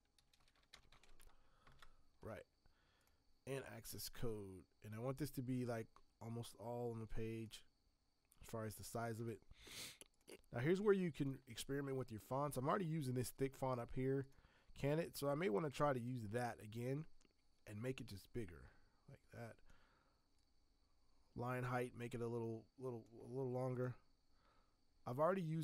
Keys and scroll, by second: 0.0-1.5 typing, 1.7 ctrl+Return.